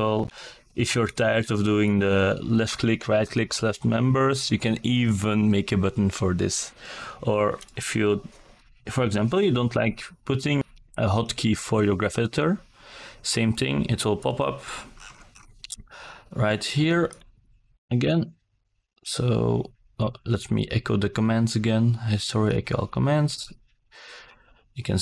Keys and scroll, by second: 6.4 g, 14.7 g, 20.0 g.